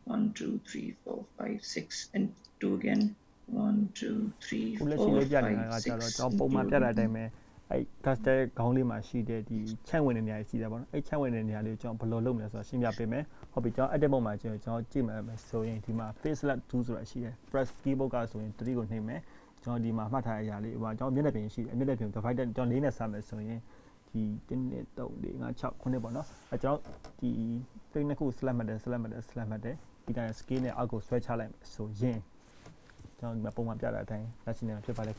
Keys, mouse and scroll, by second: 2.0 shift+click, 2.6 shift+click, 6.5 shift+click, 7.0 shift+click, 9.9 shift+click, 10.6 shift+click, 17.2-19.3 scroll down 1, 22.7 click.